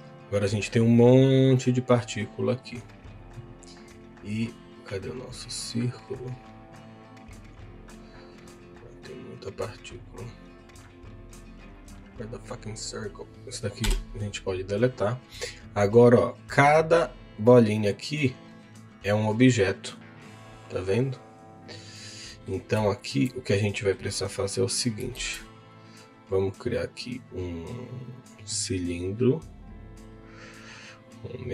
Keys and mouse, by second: 1.2 click, 1.6 middle click, 11.8 click, 14.0 Delete, 14.7 click, 15.6 click, 16.2 click, 17.1 click, 17.4 middle click, 18.5 click, 19.8 click, 22.3 middle click, 22.8 shift+middle click, 23.6 middle click, 25.1 shift+a.